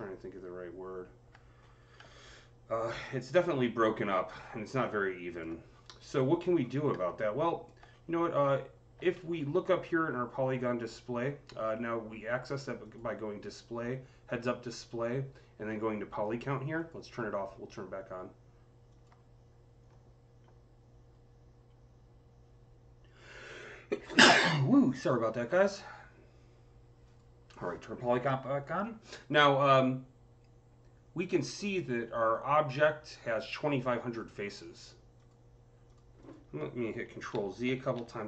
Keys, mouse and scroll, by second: 1.5-1.8 scroll up 5, 2.1-5.6 alt+drag, 5.5-5.9 scroll up 4, 6.2-6.5 scroll down 10, 7.0 alt+click, 7.7 typing, 7.7-8.3 scroll up 5, 9.0 alt+middle click, 12.7 click, 12.7 alt+middle click, 12.7 scroll down 1, 12.7 c, 16.6 click, 16.6 alt+middle click, 16.6 c, 18.7 click, 26.9 click, 26.9 c, 26.9 click, 35.0 click, 35.0 c, 36.1 click, 37.2 ctrl+z, 37.5 ctrl+z, 37.8 ctrl+z.